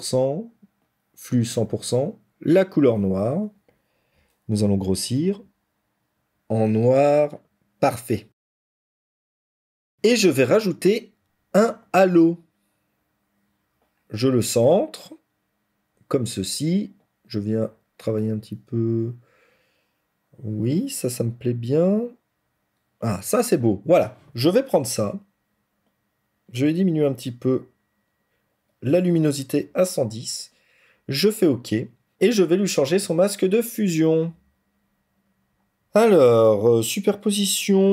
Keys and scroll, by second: 6.1 ctrl+z.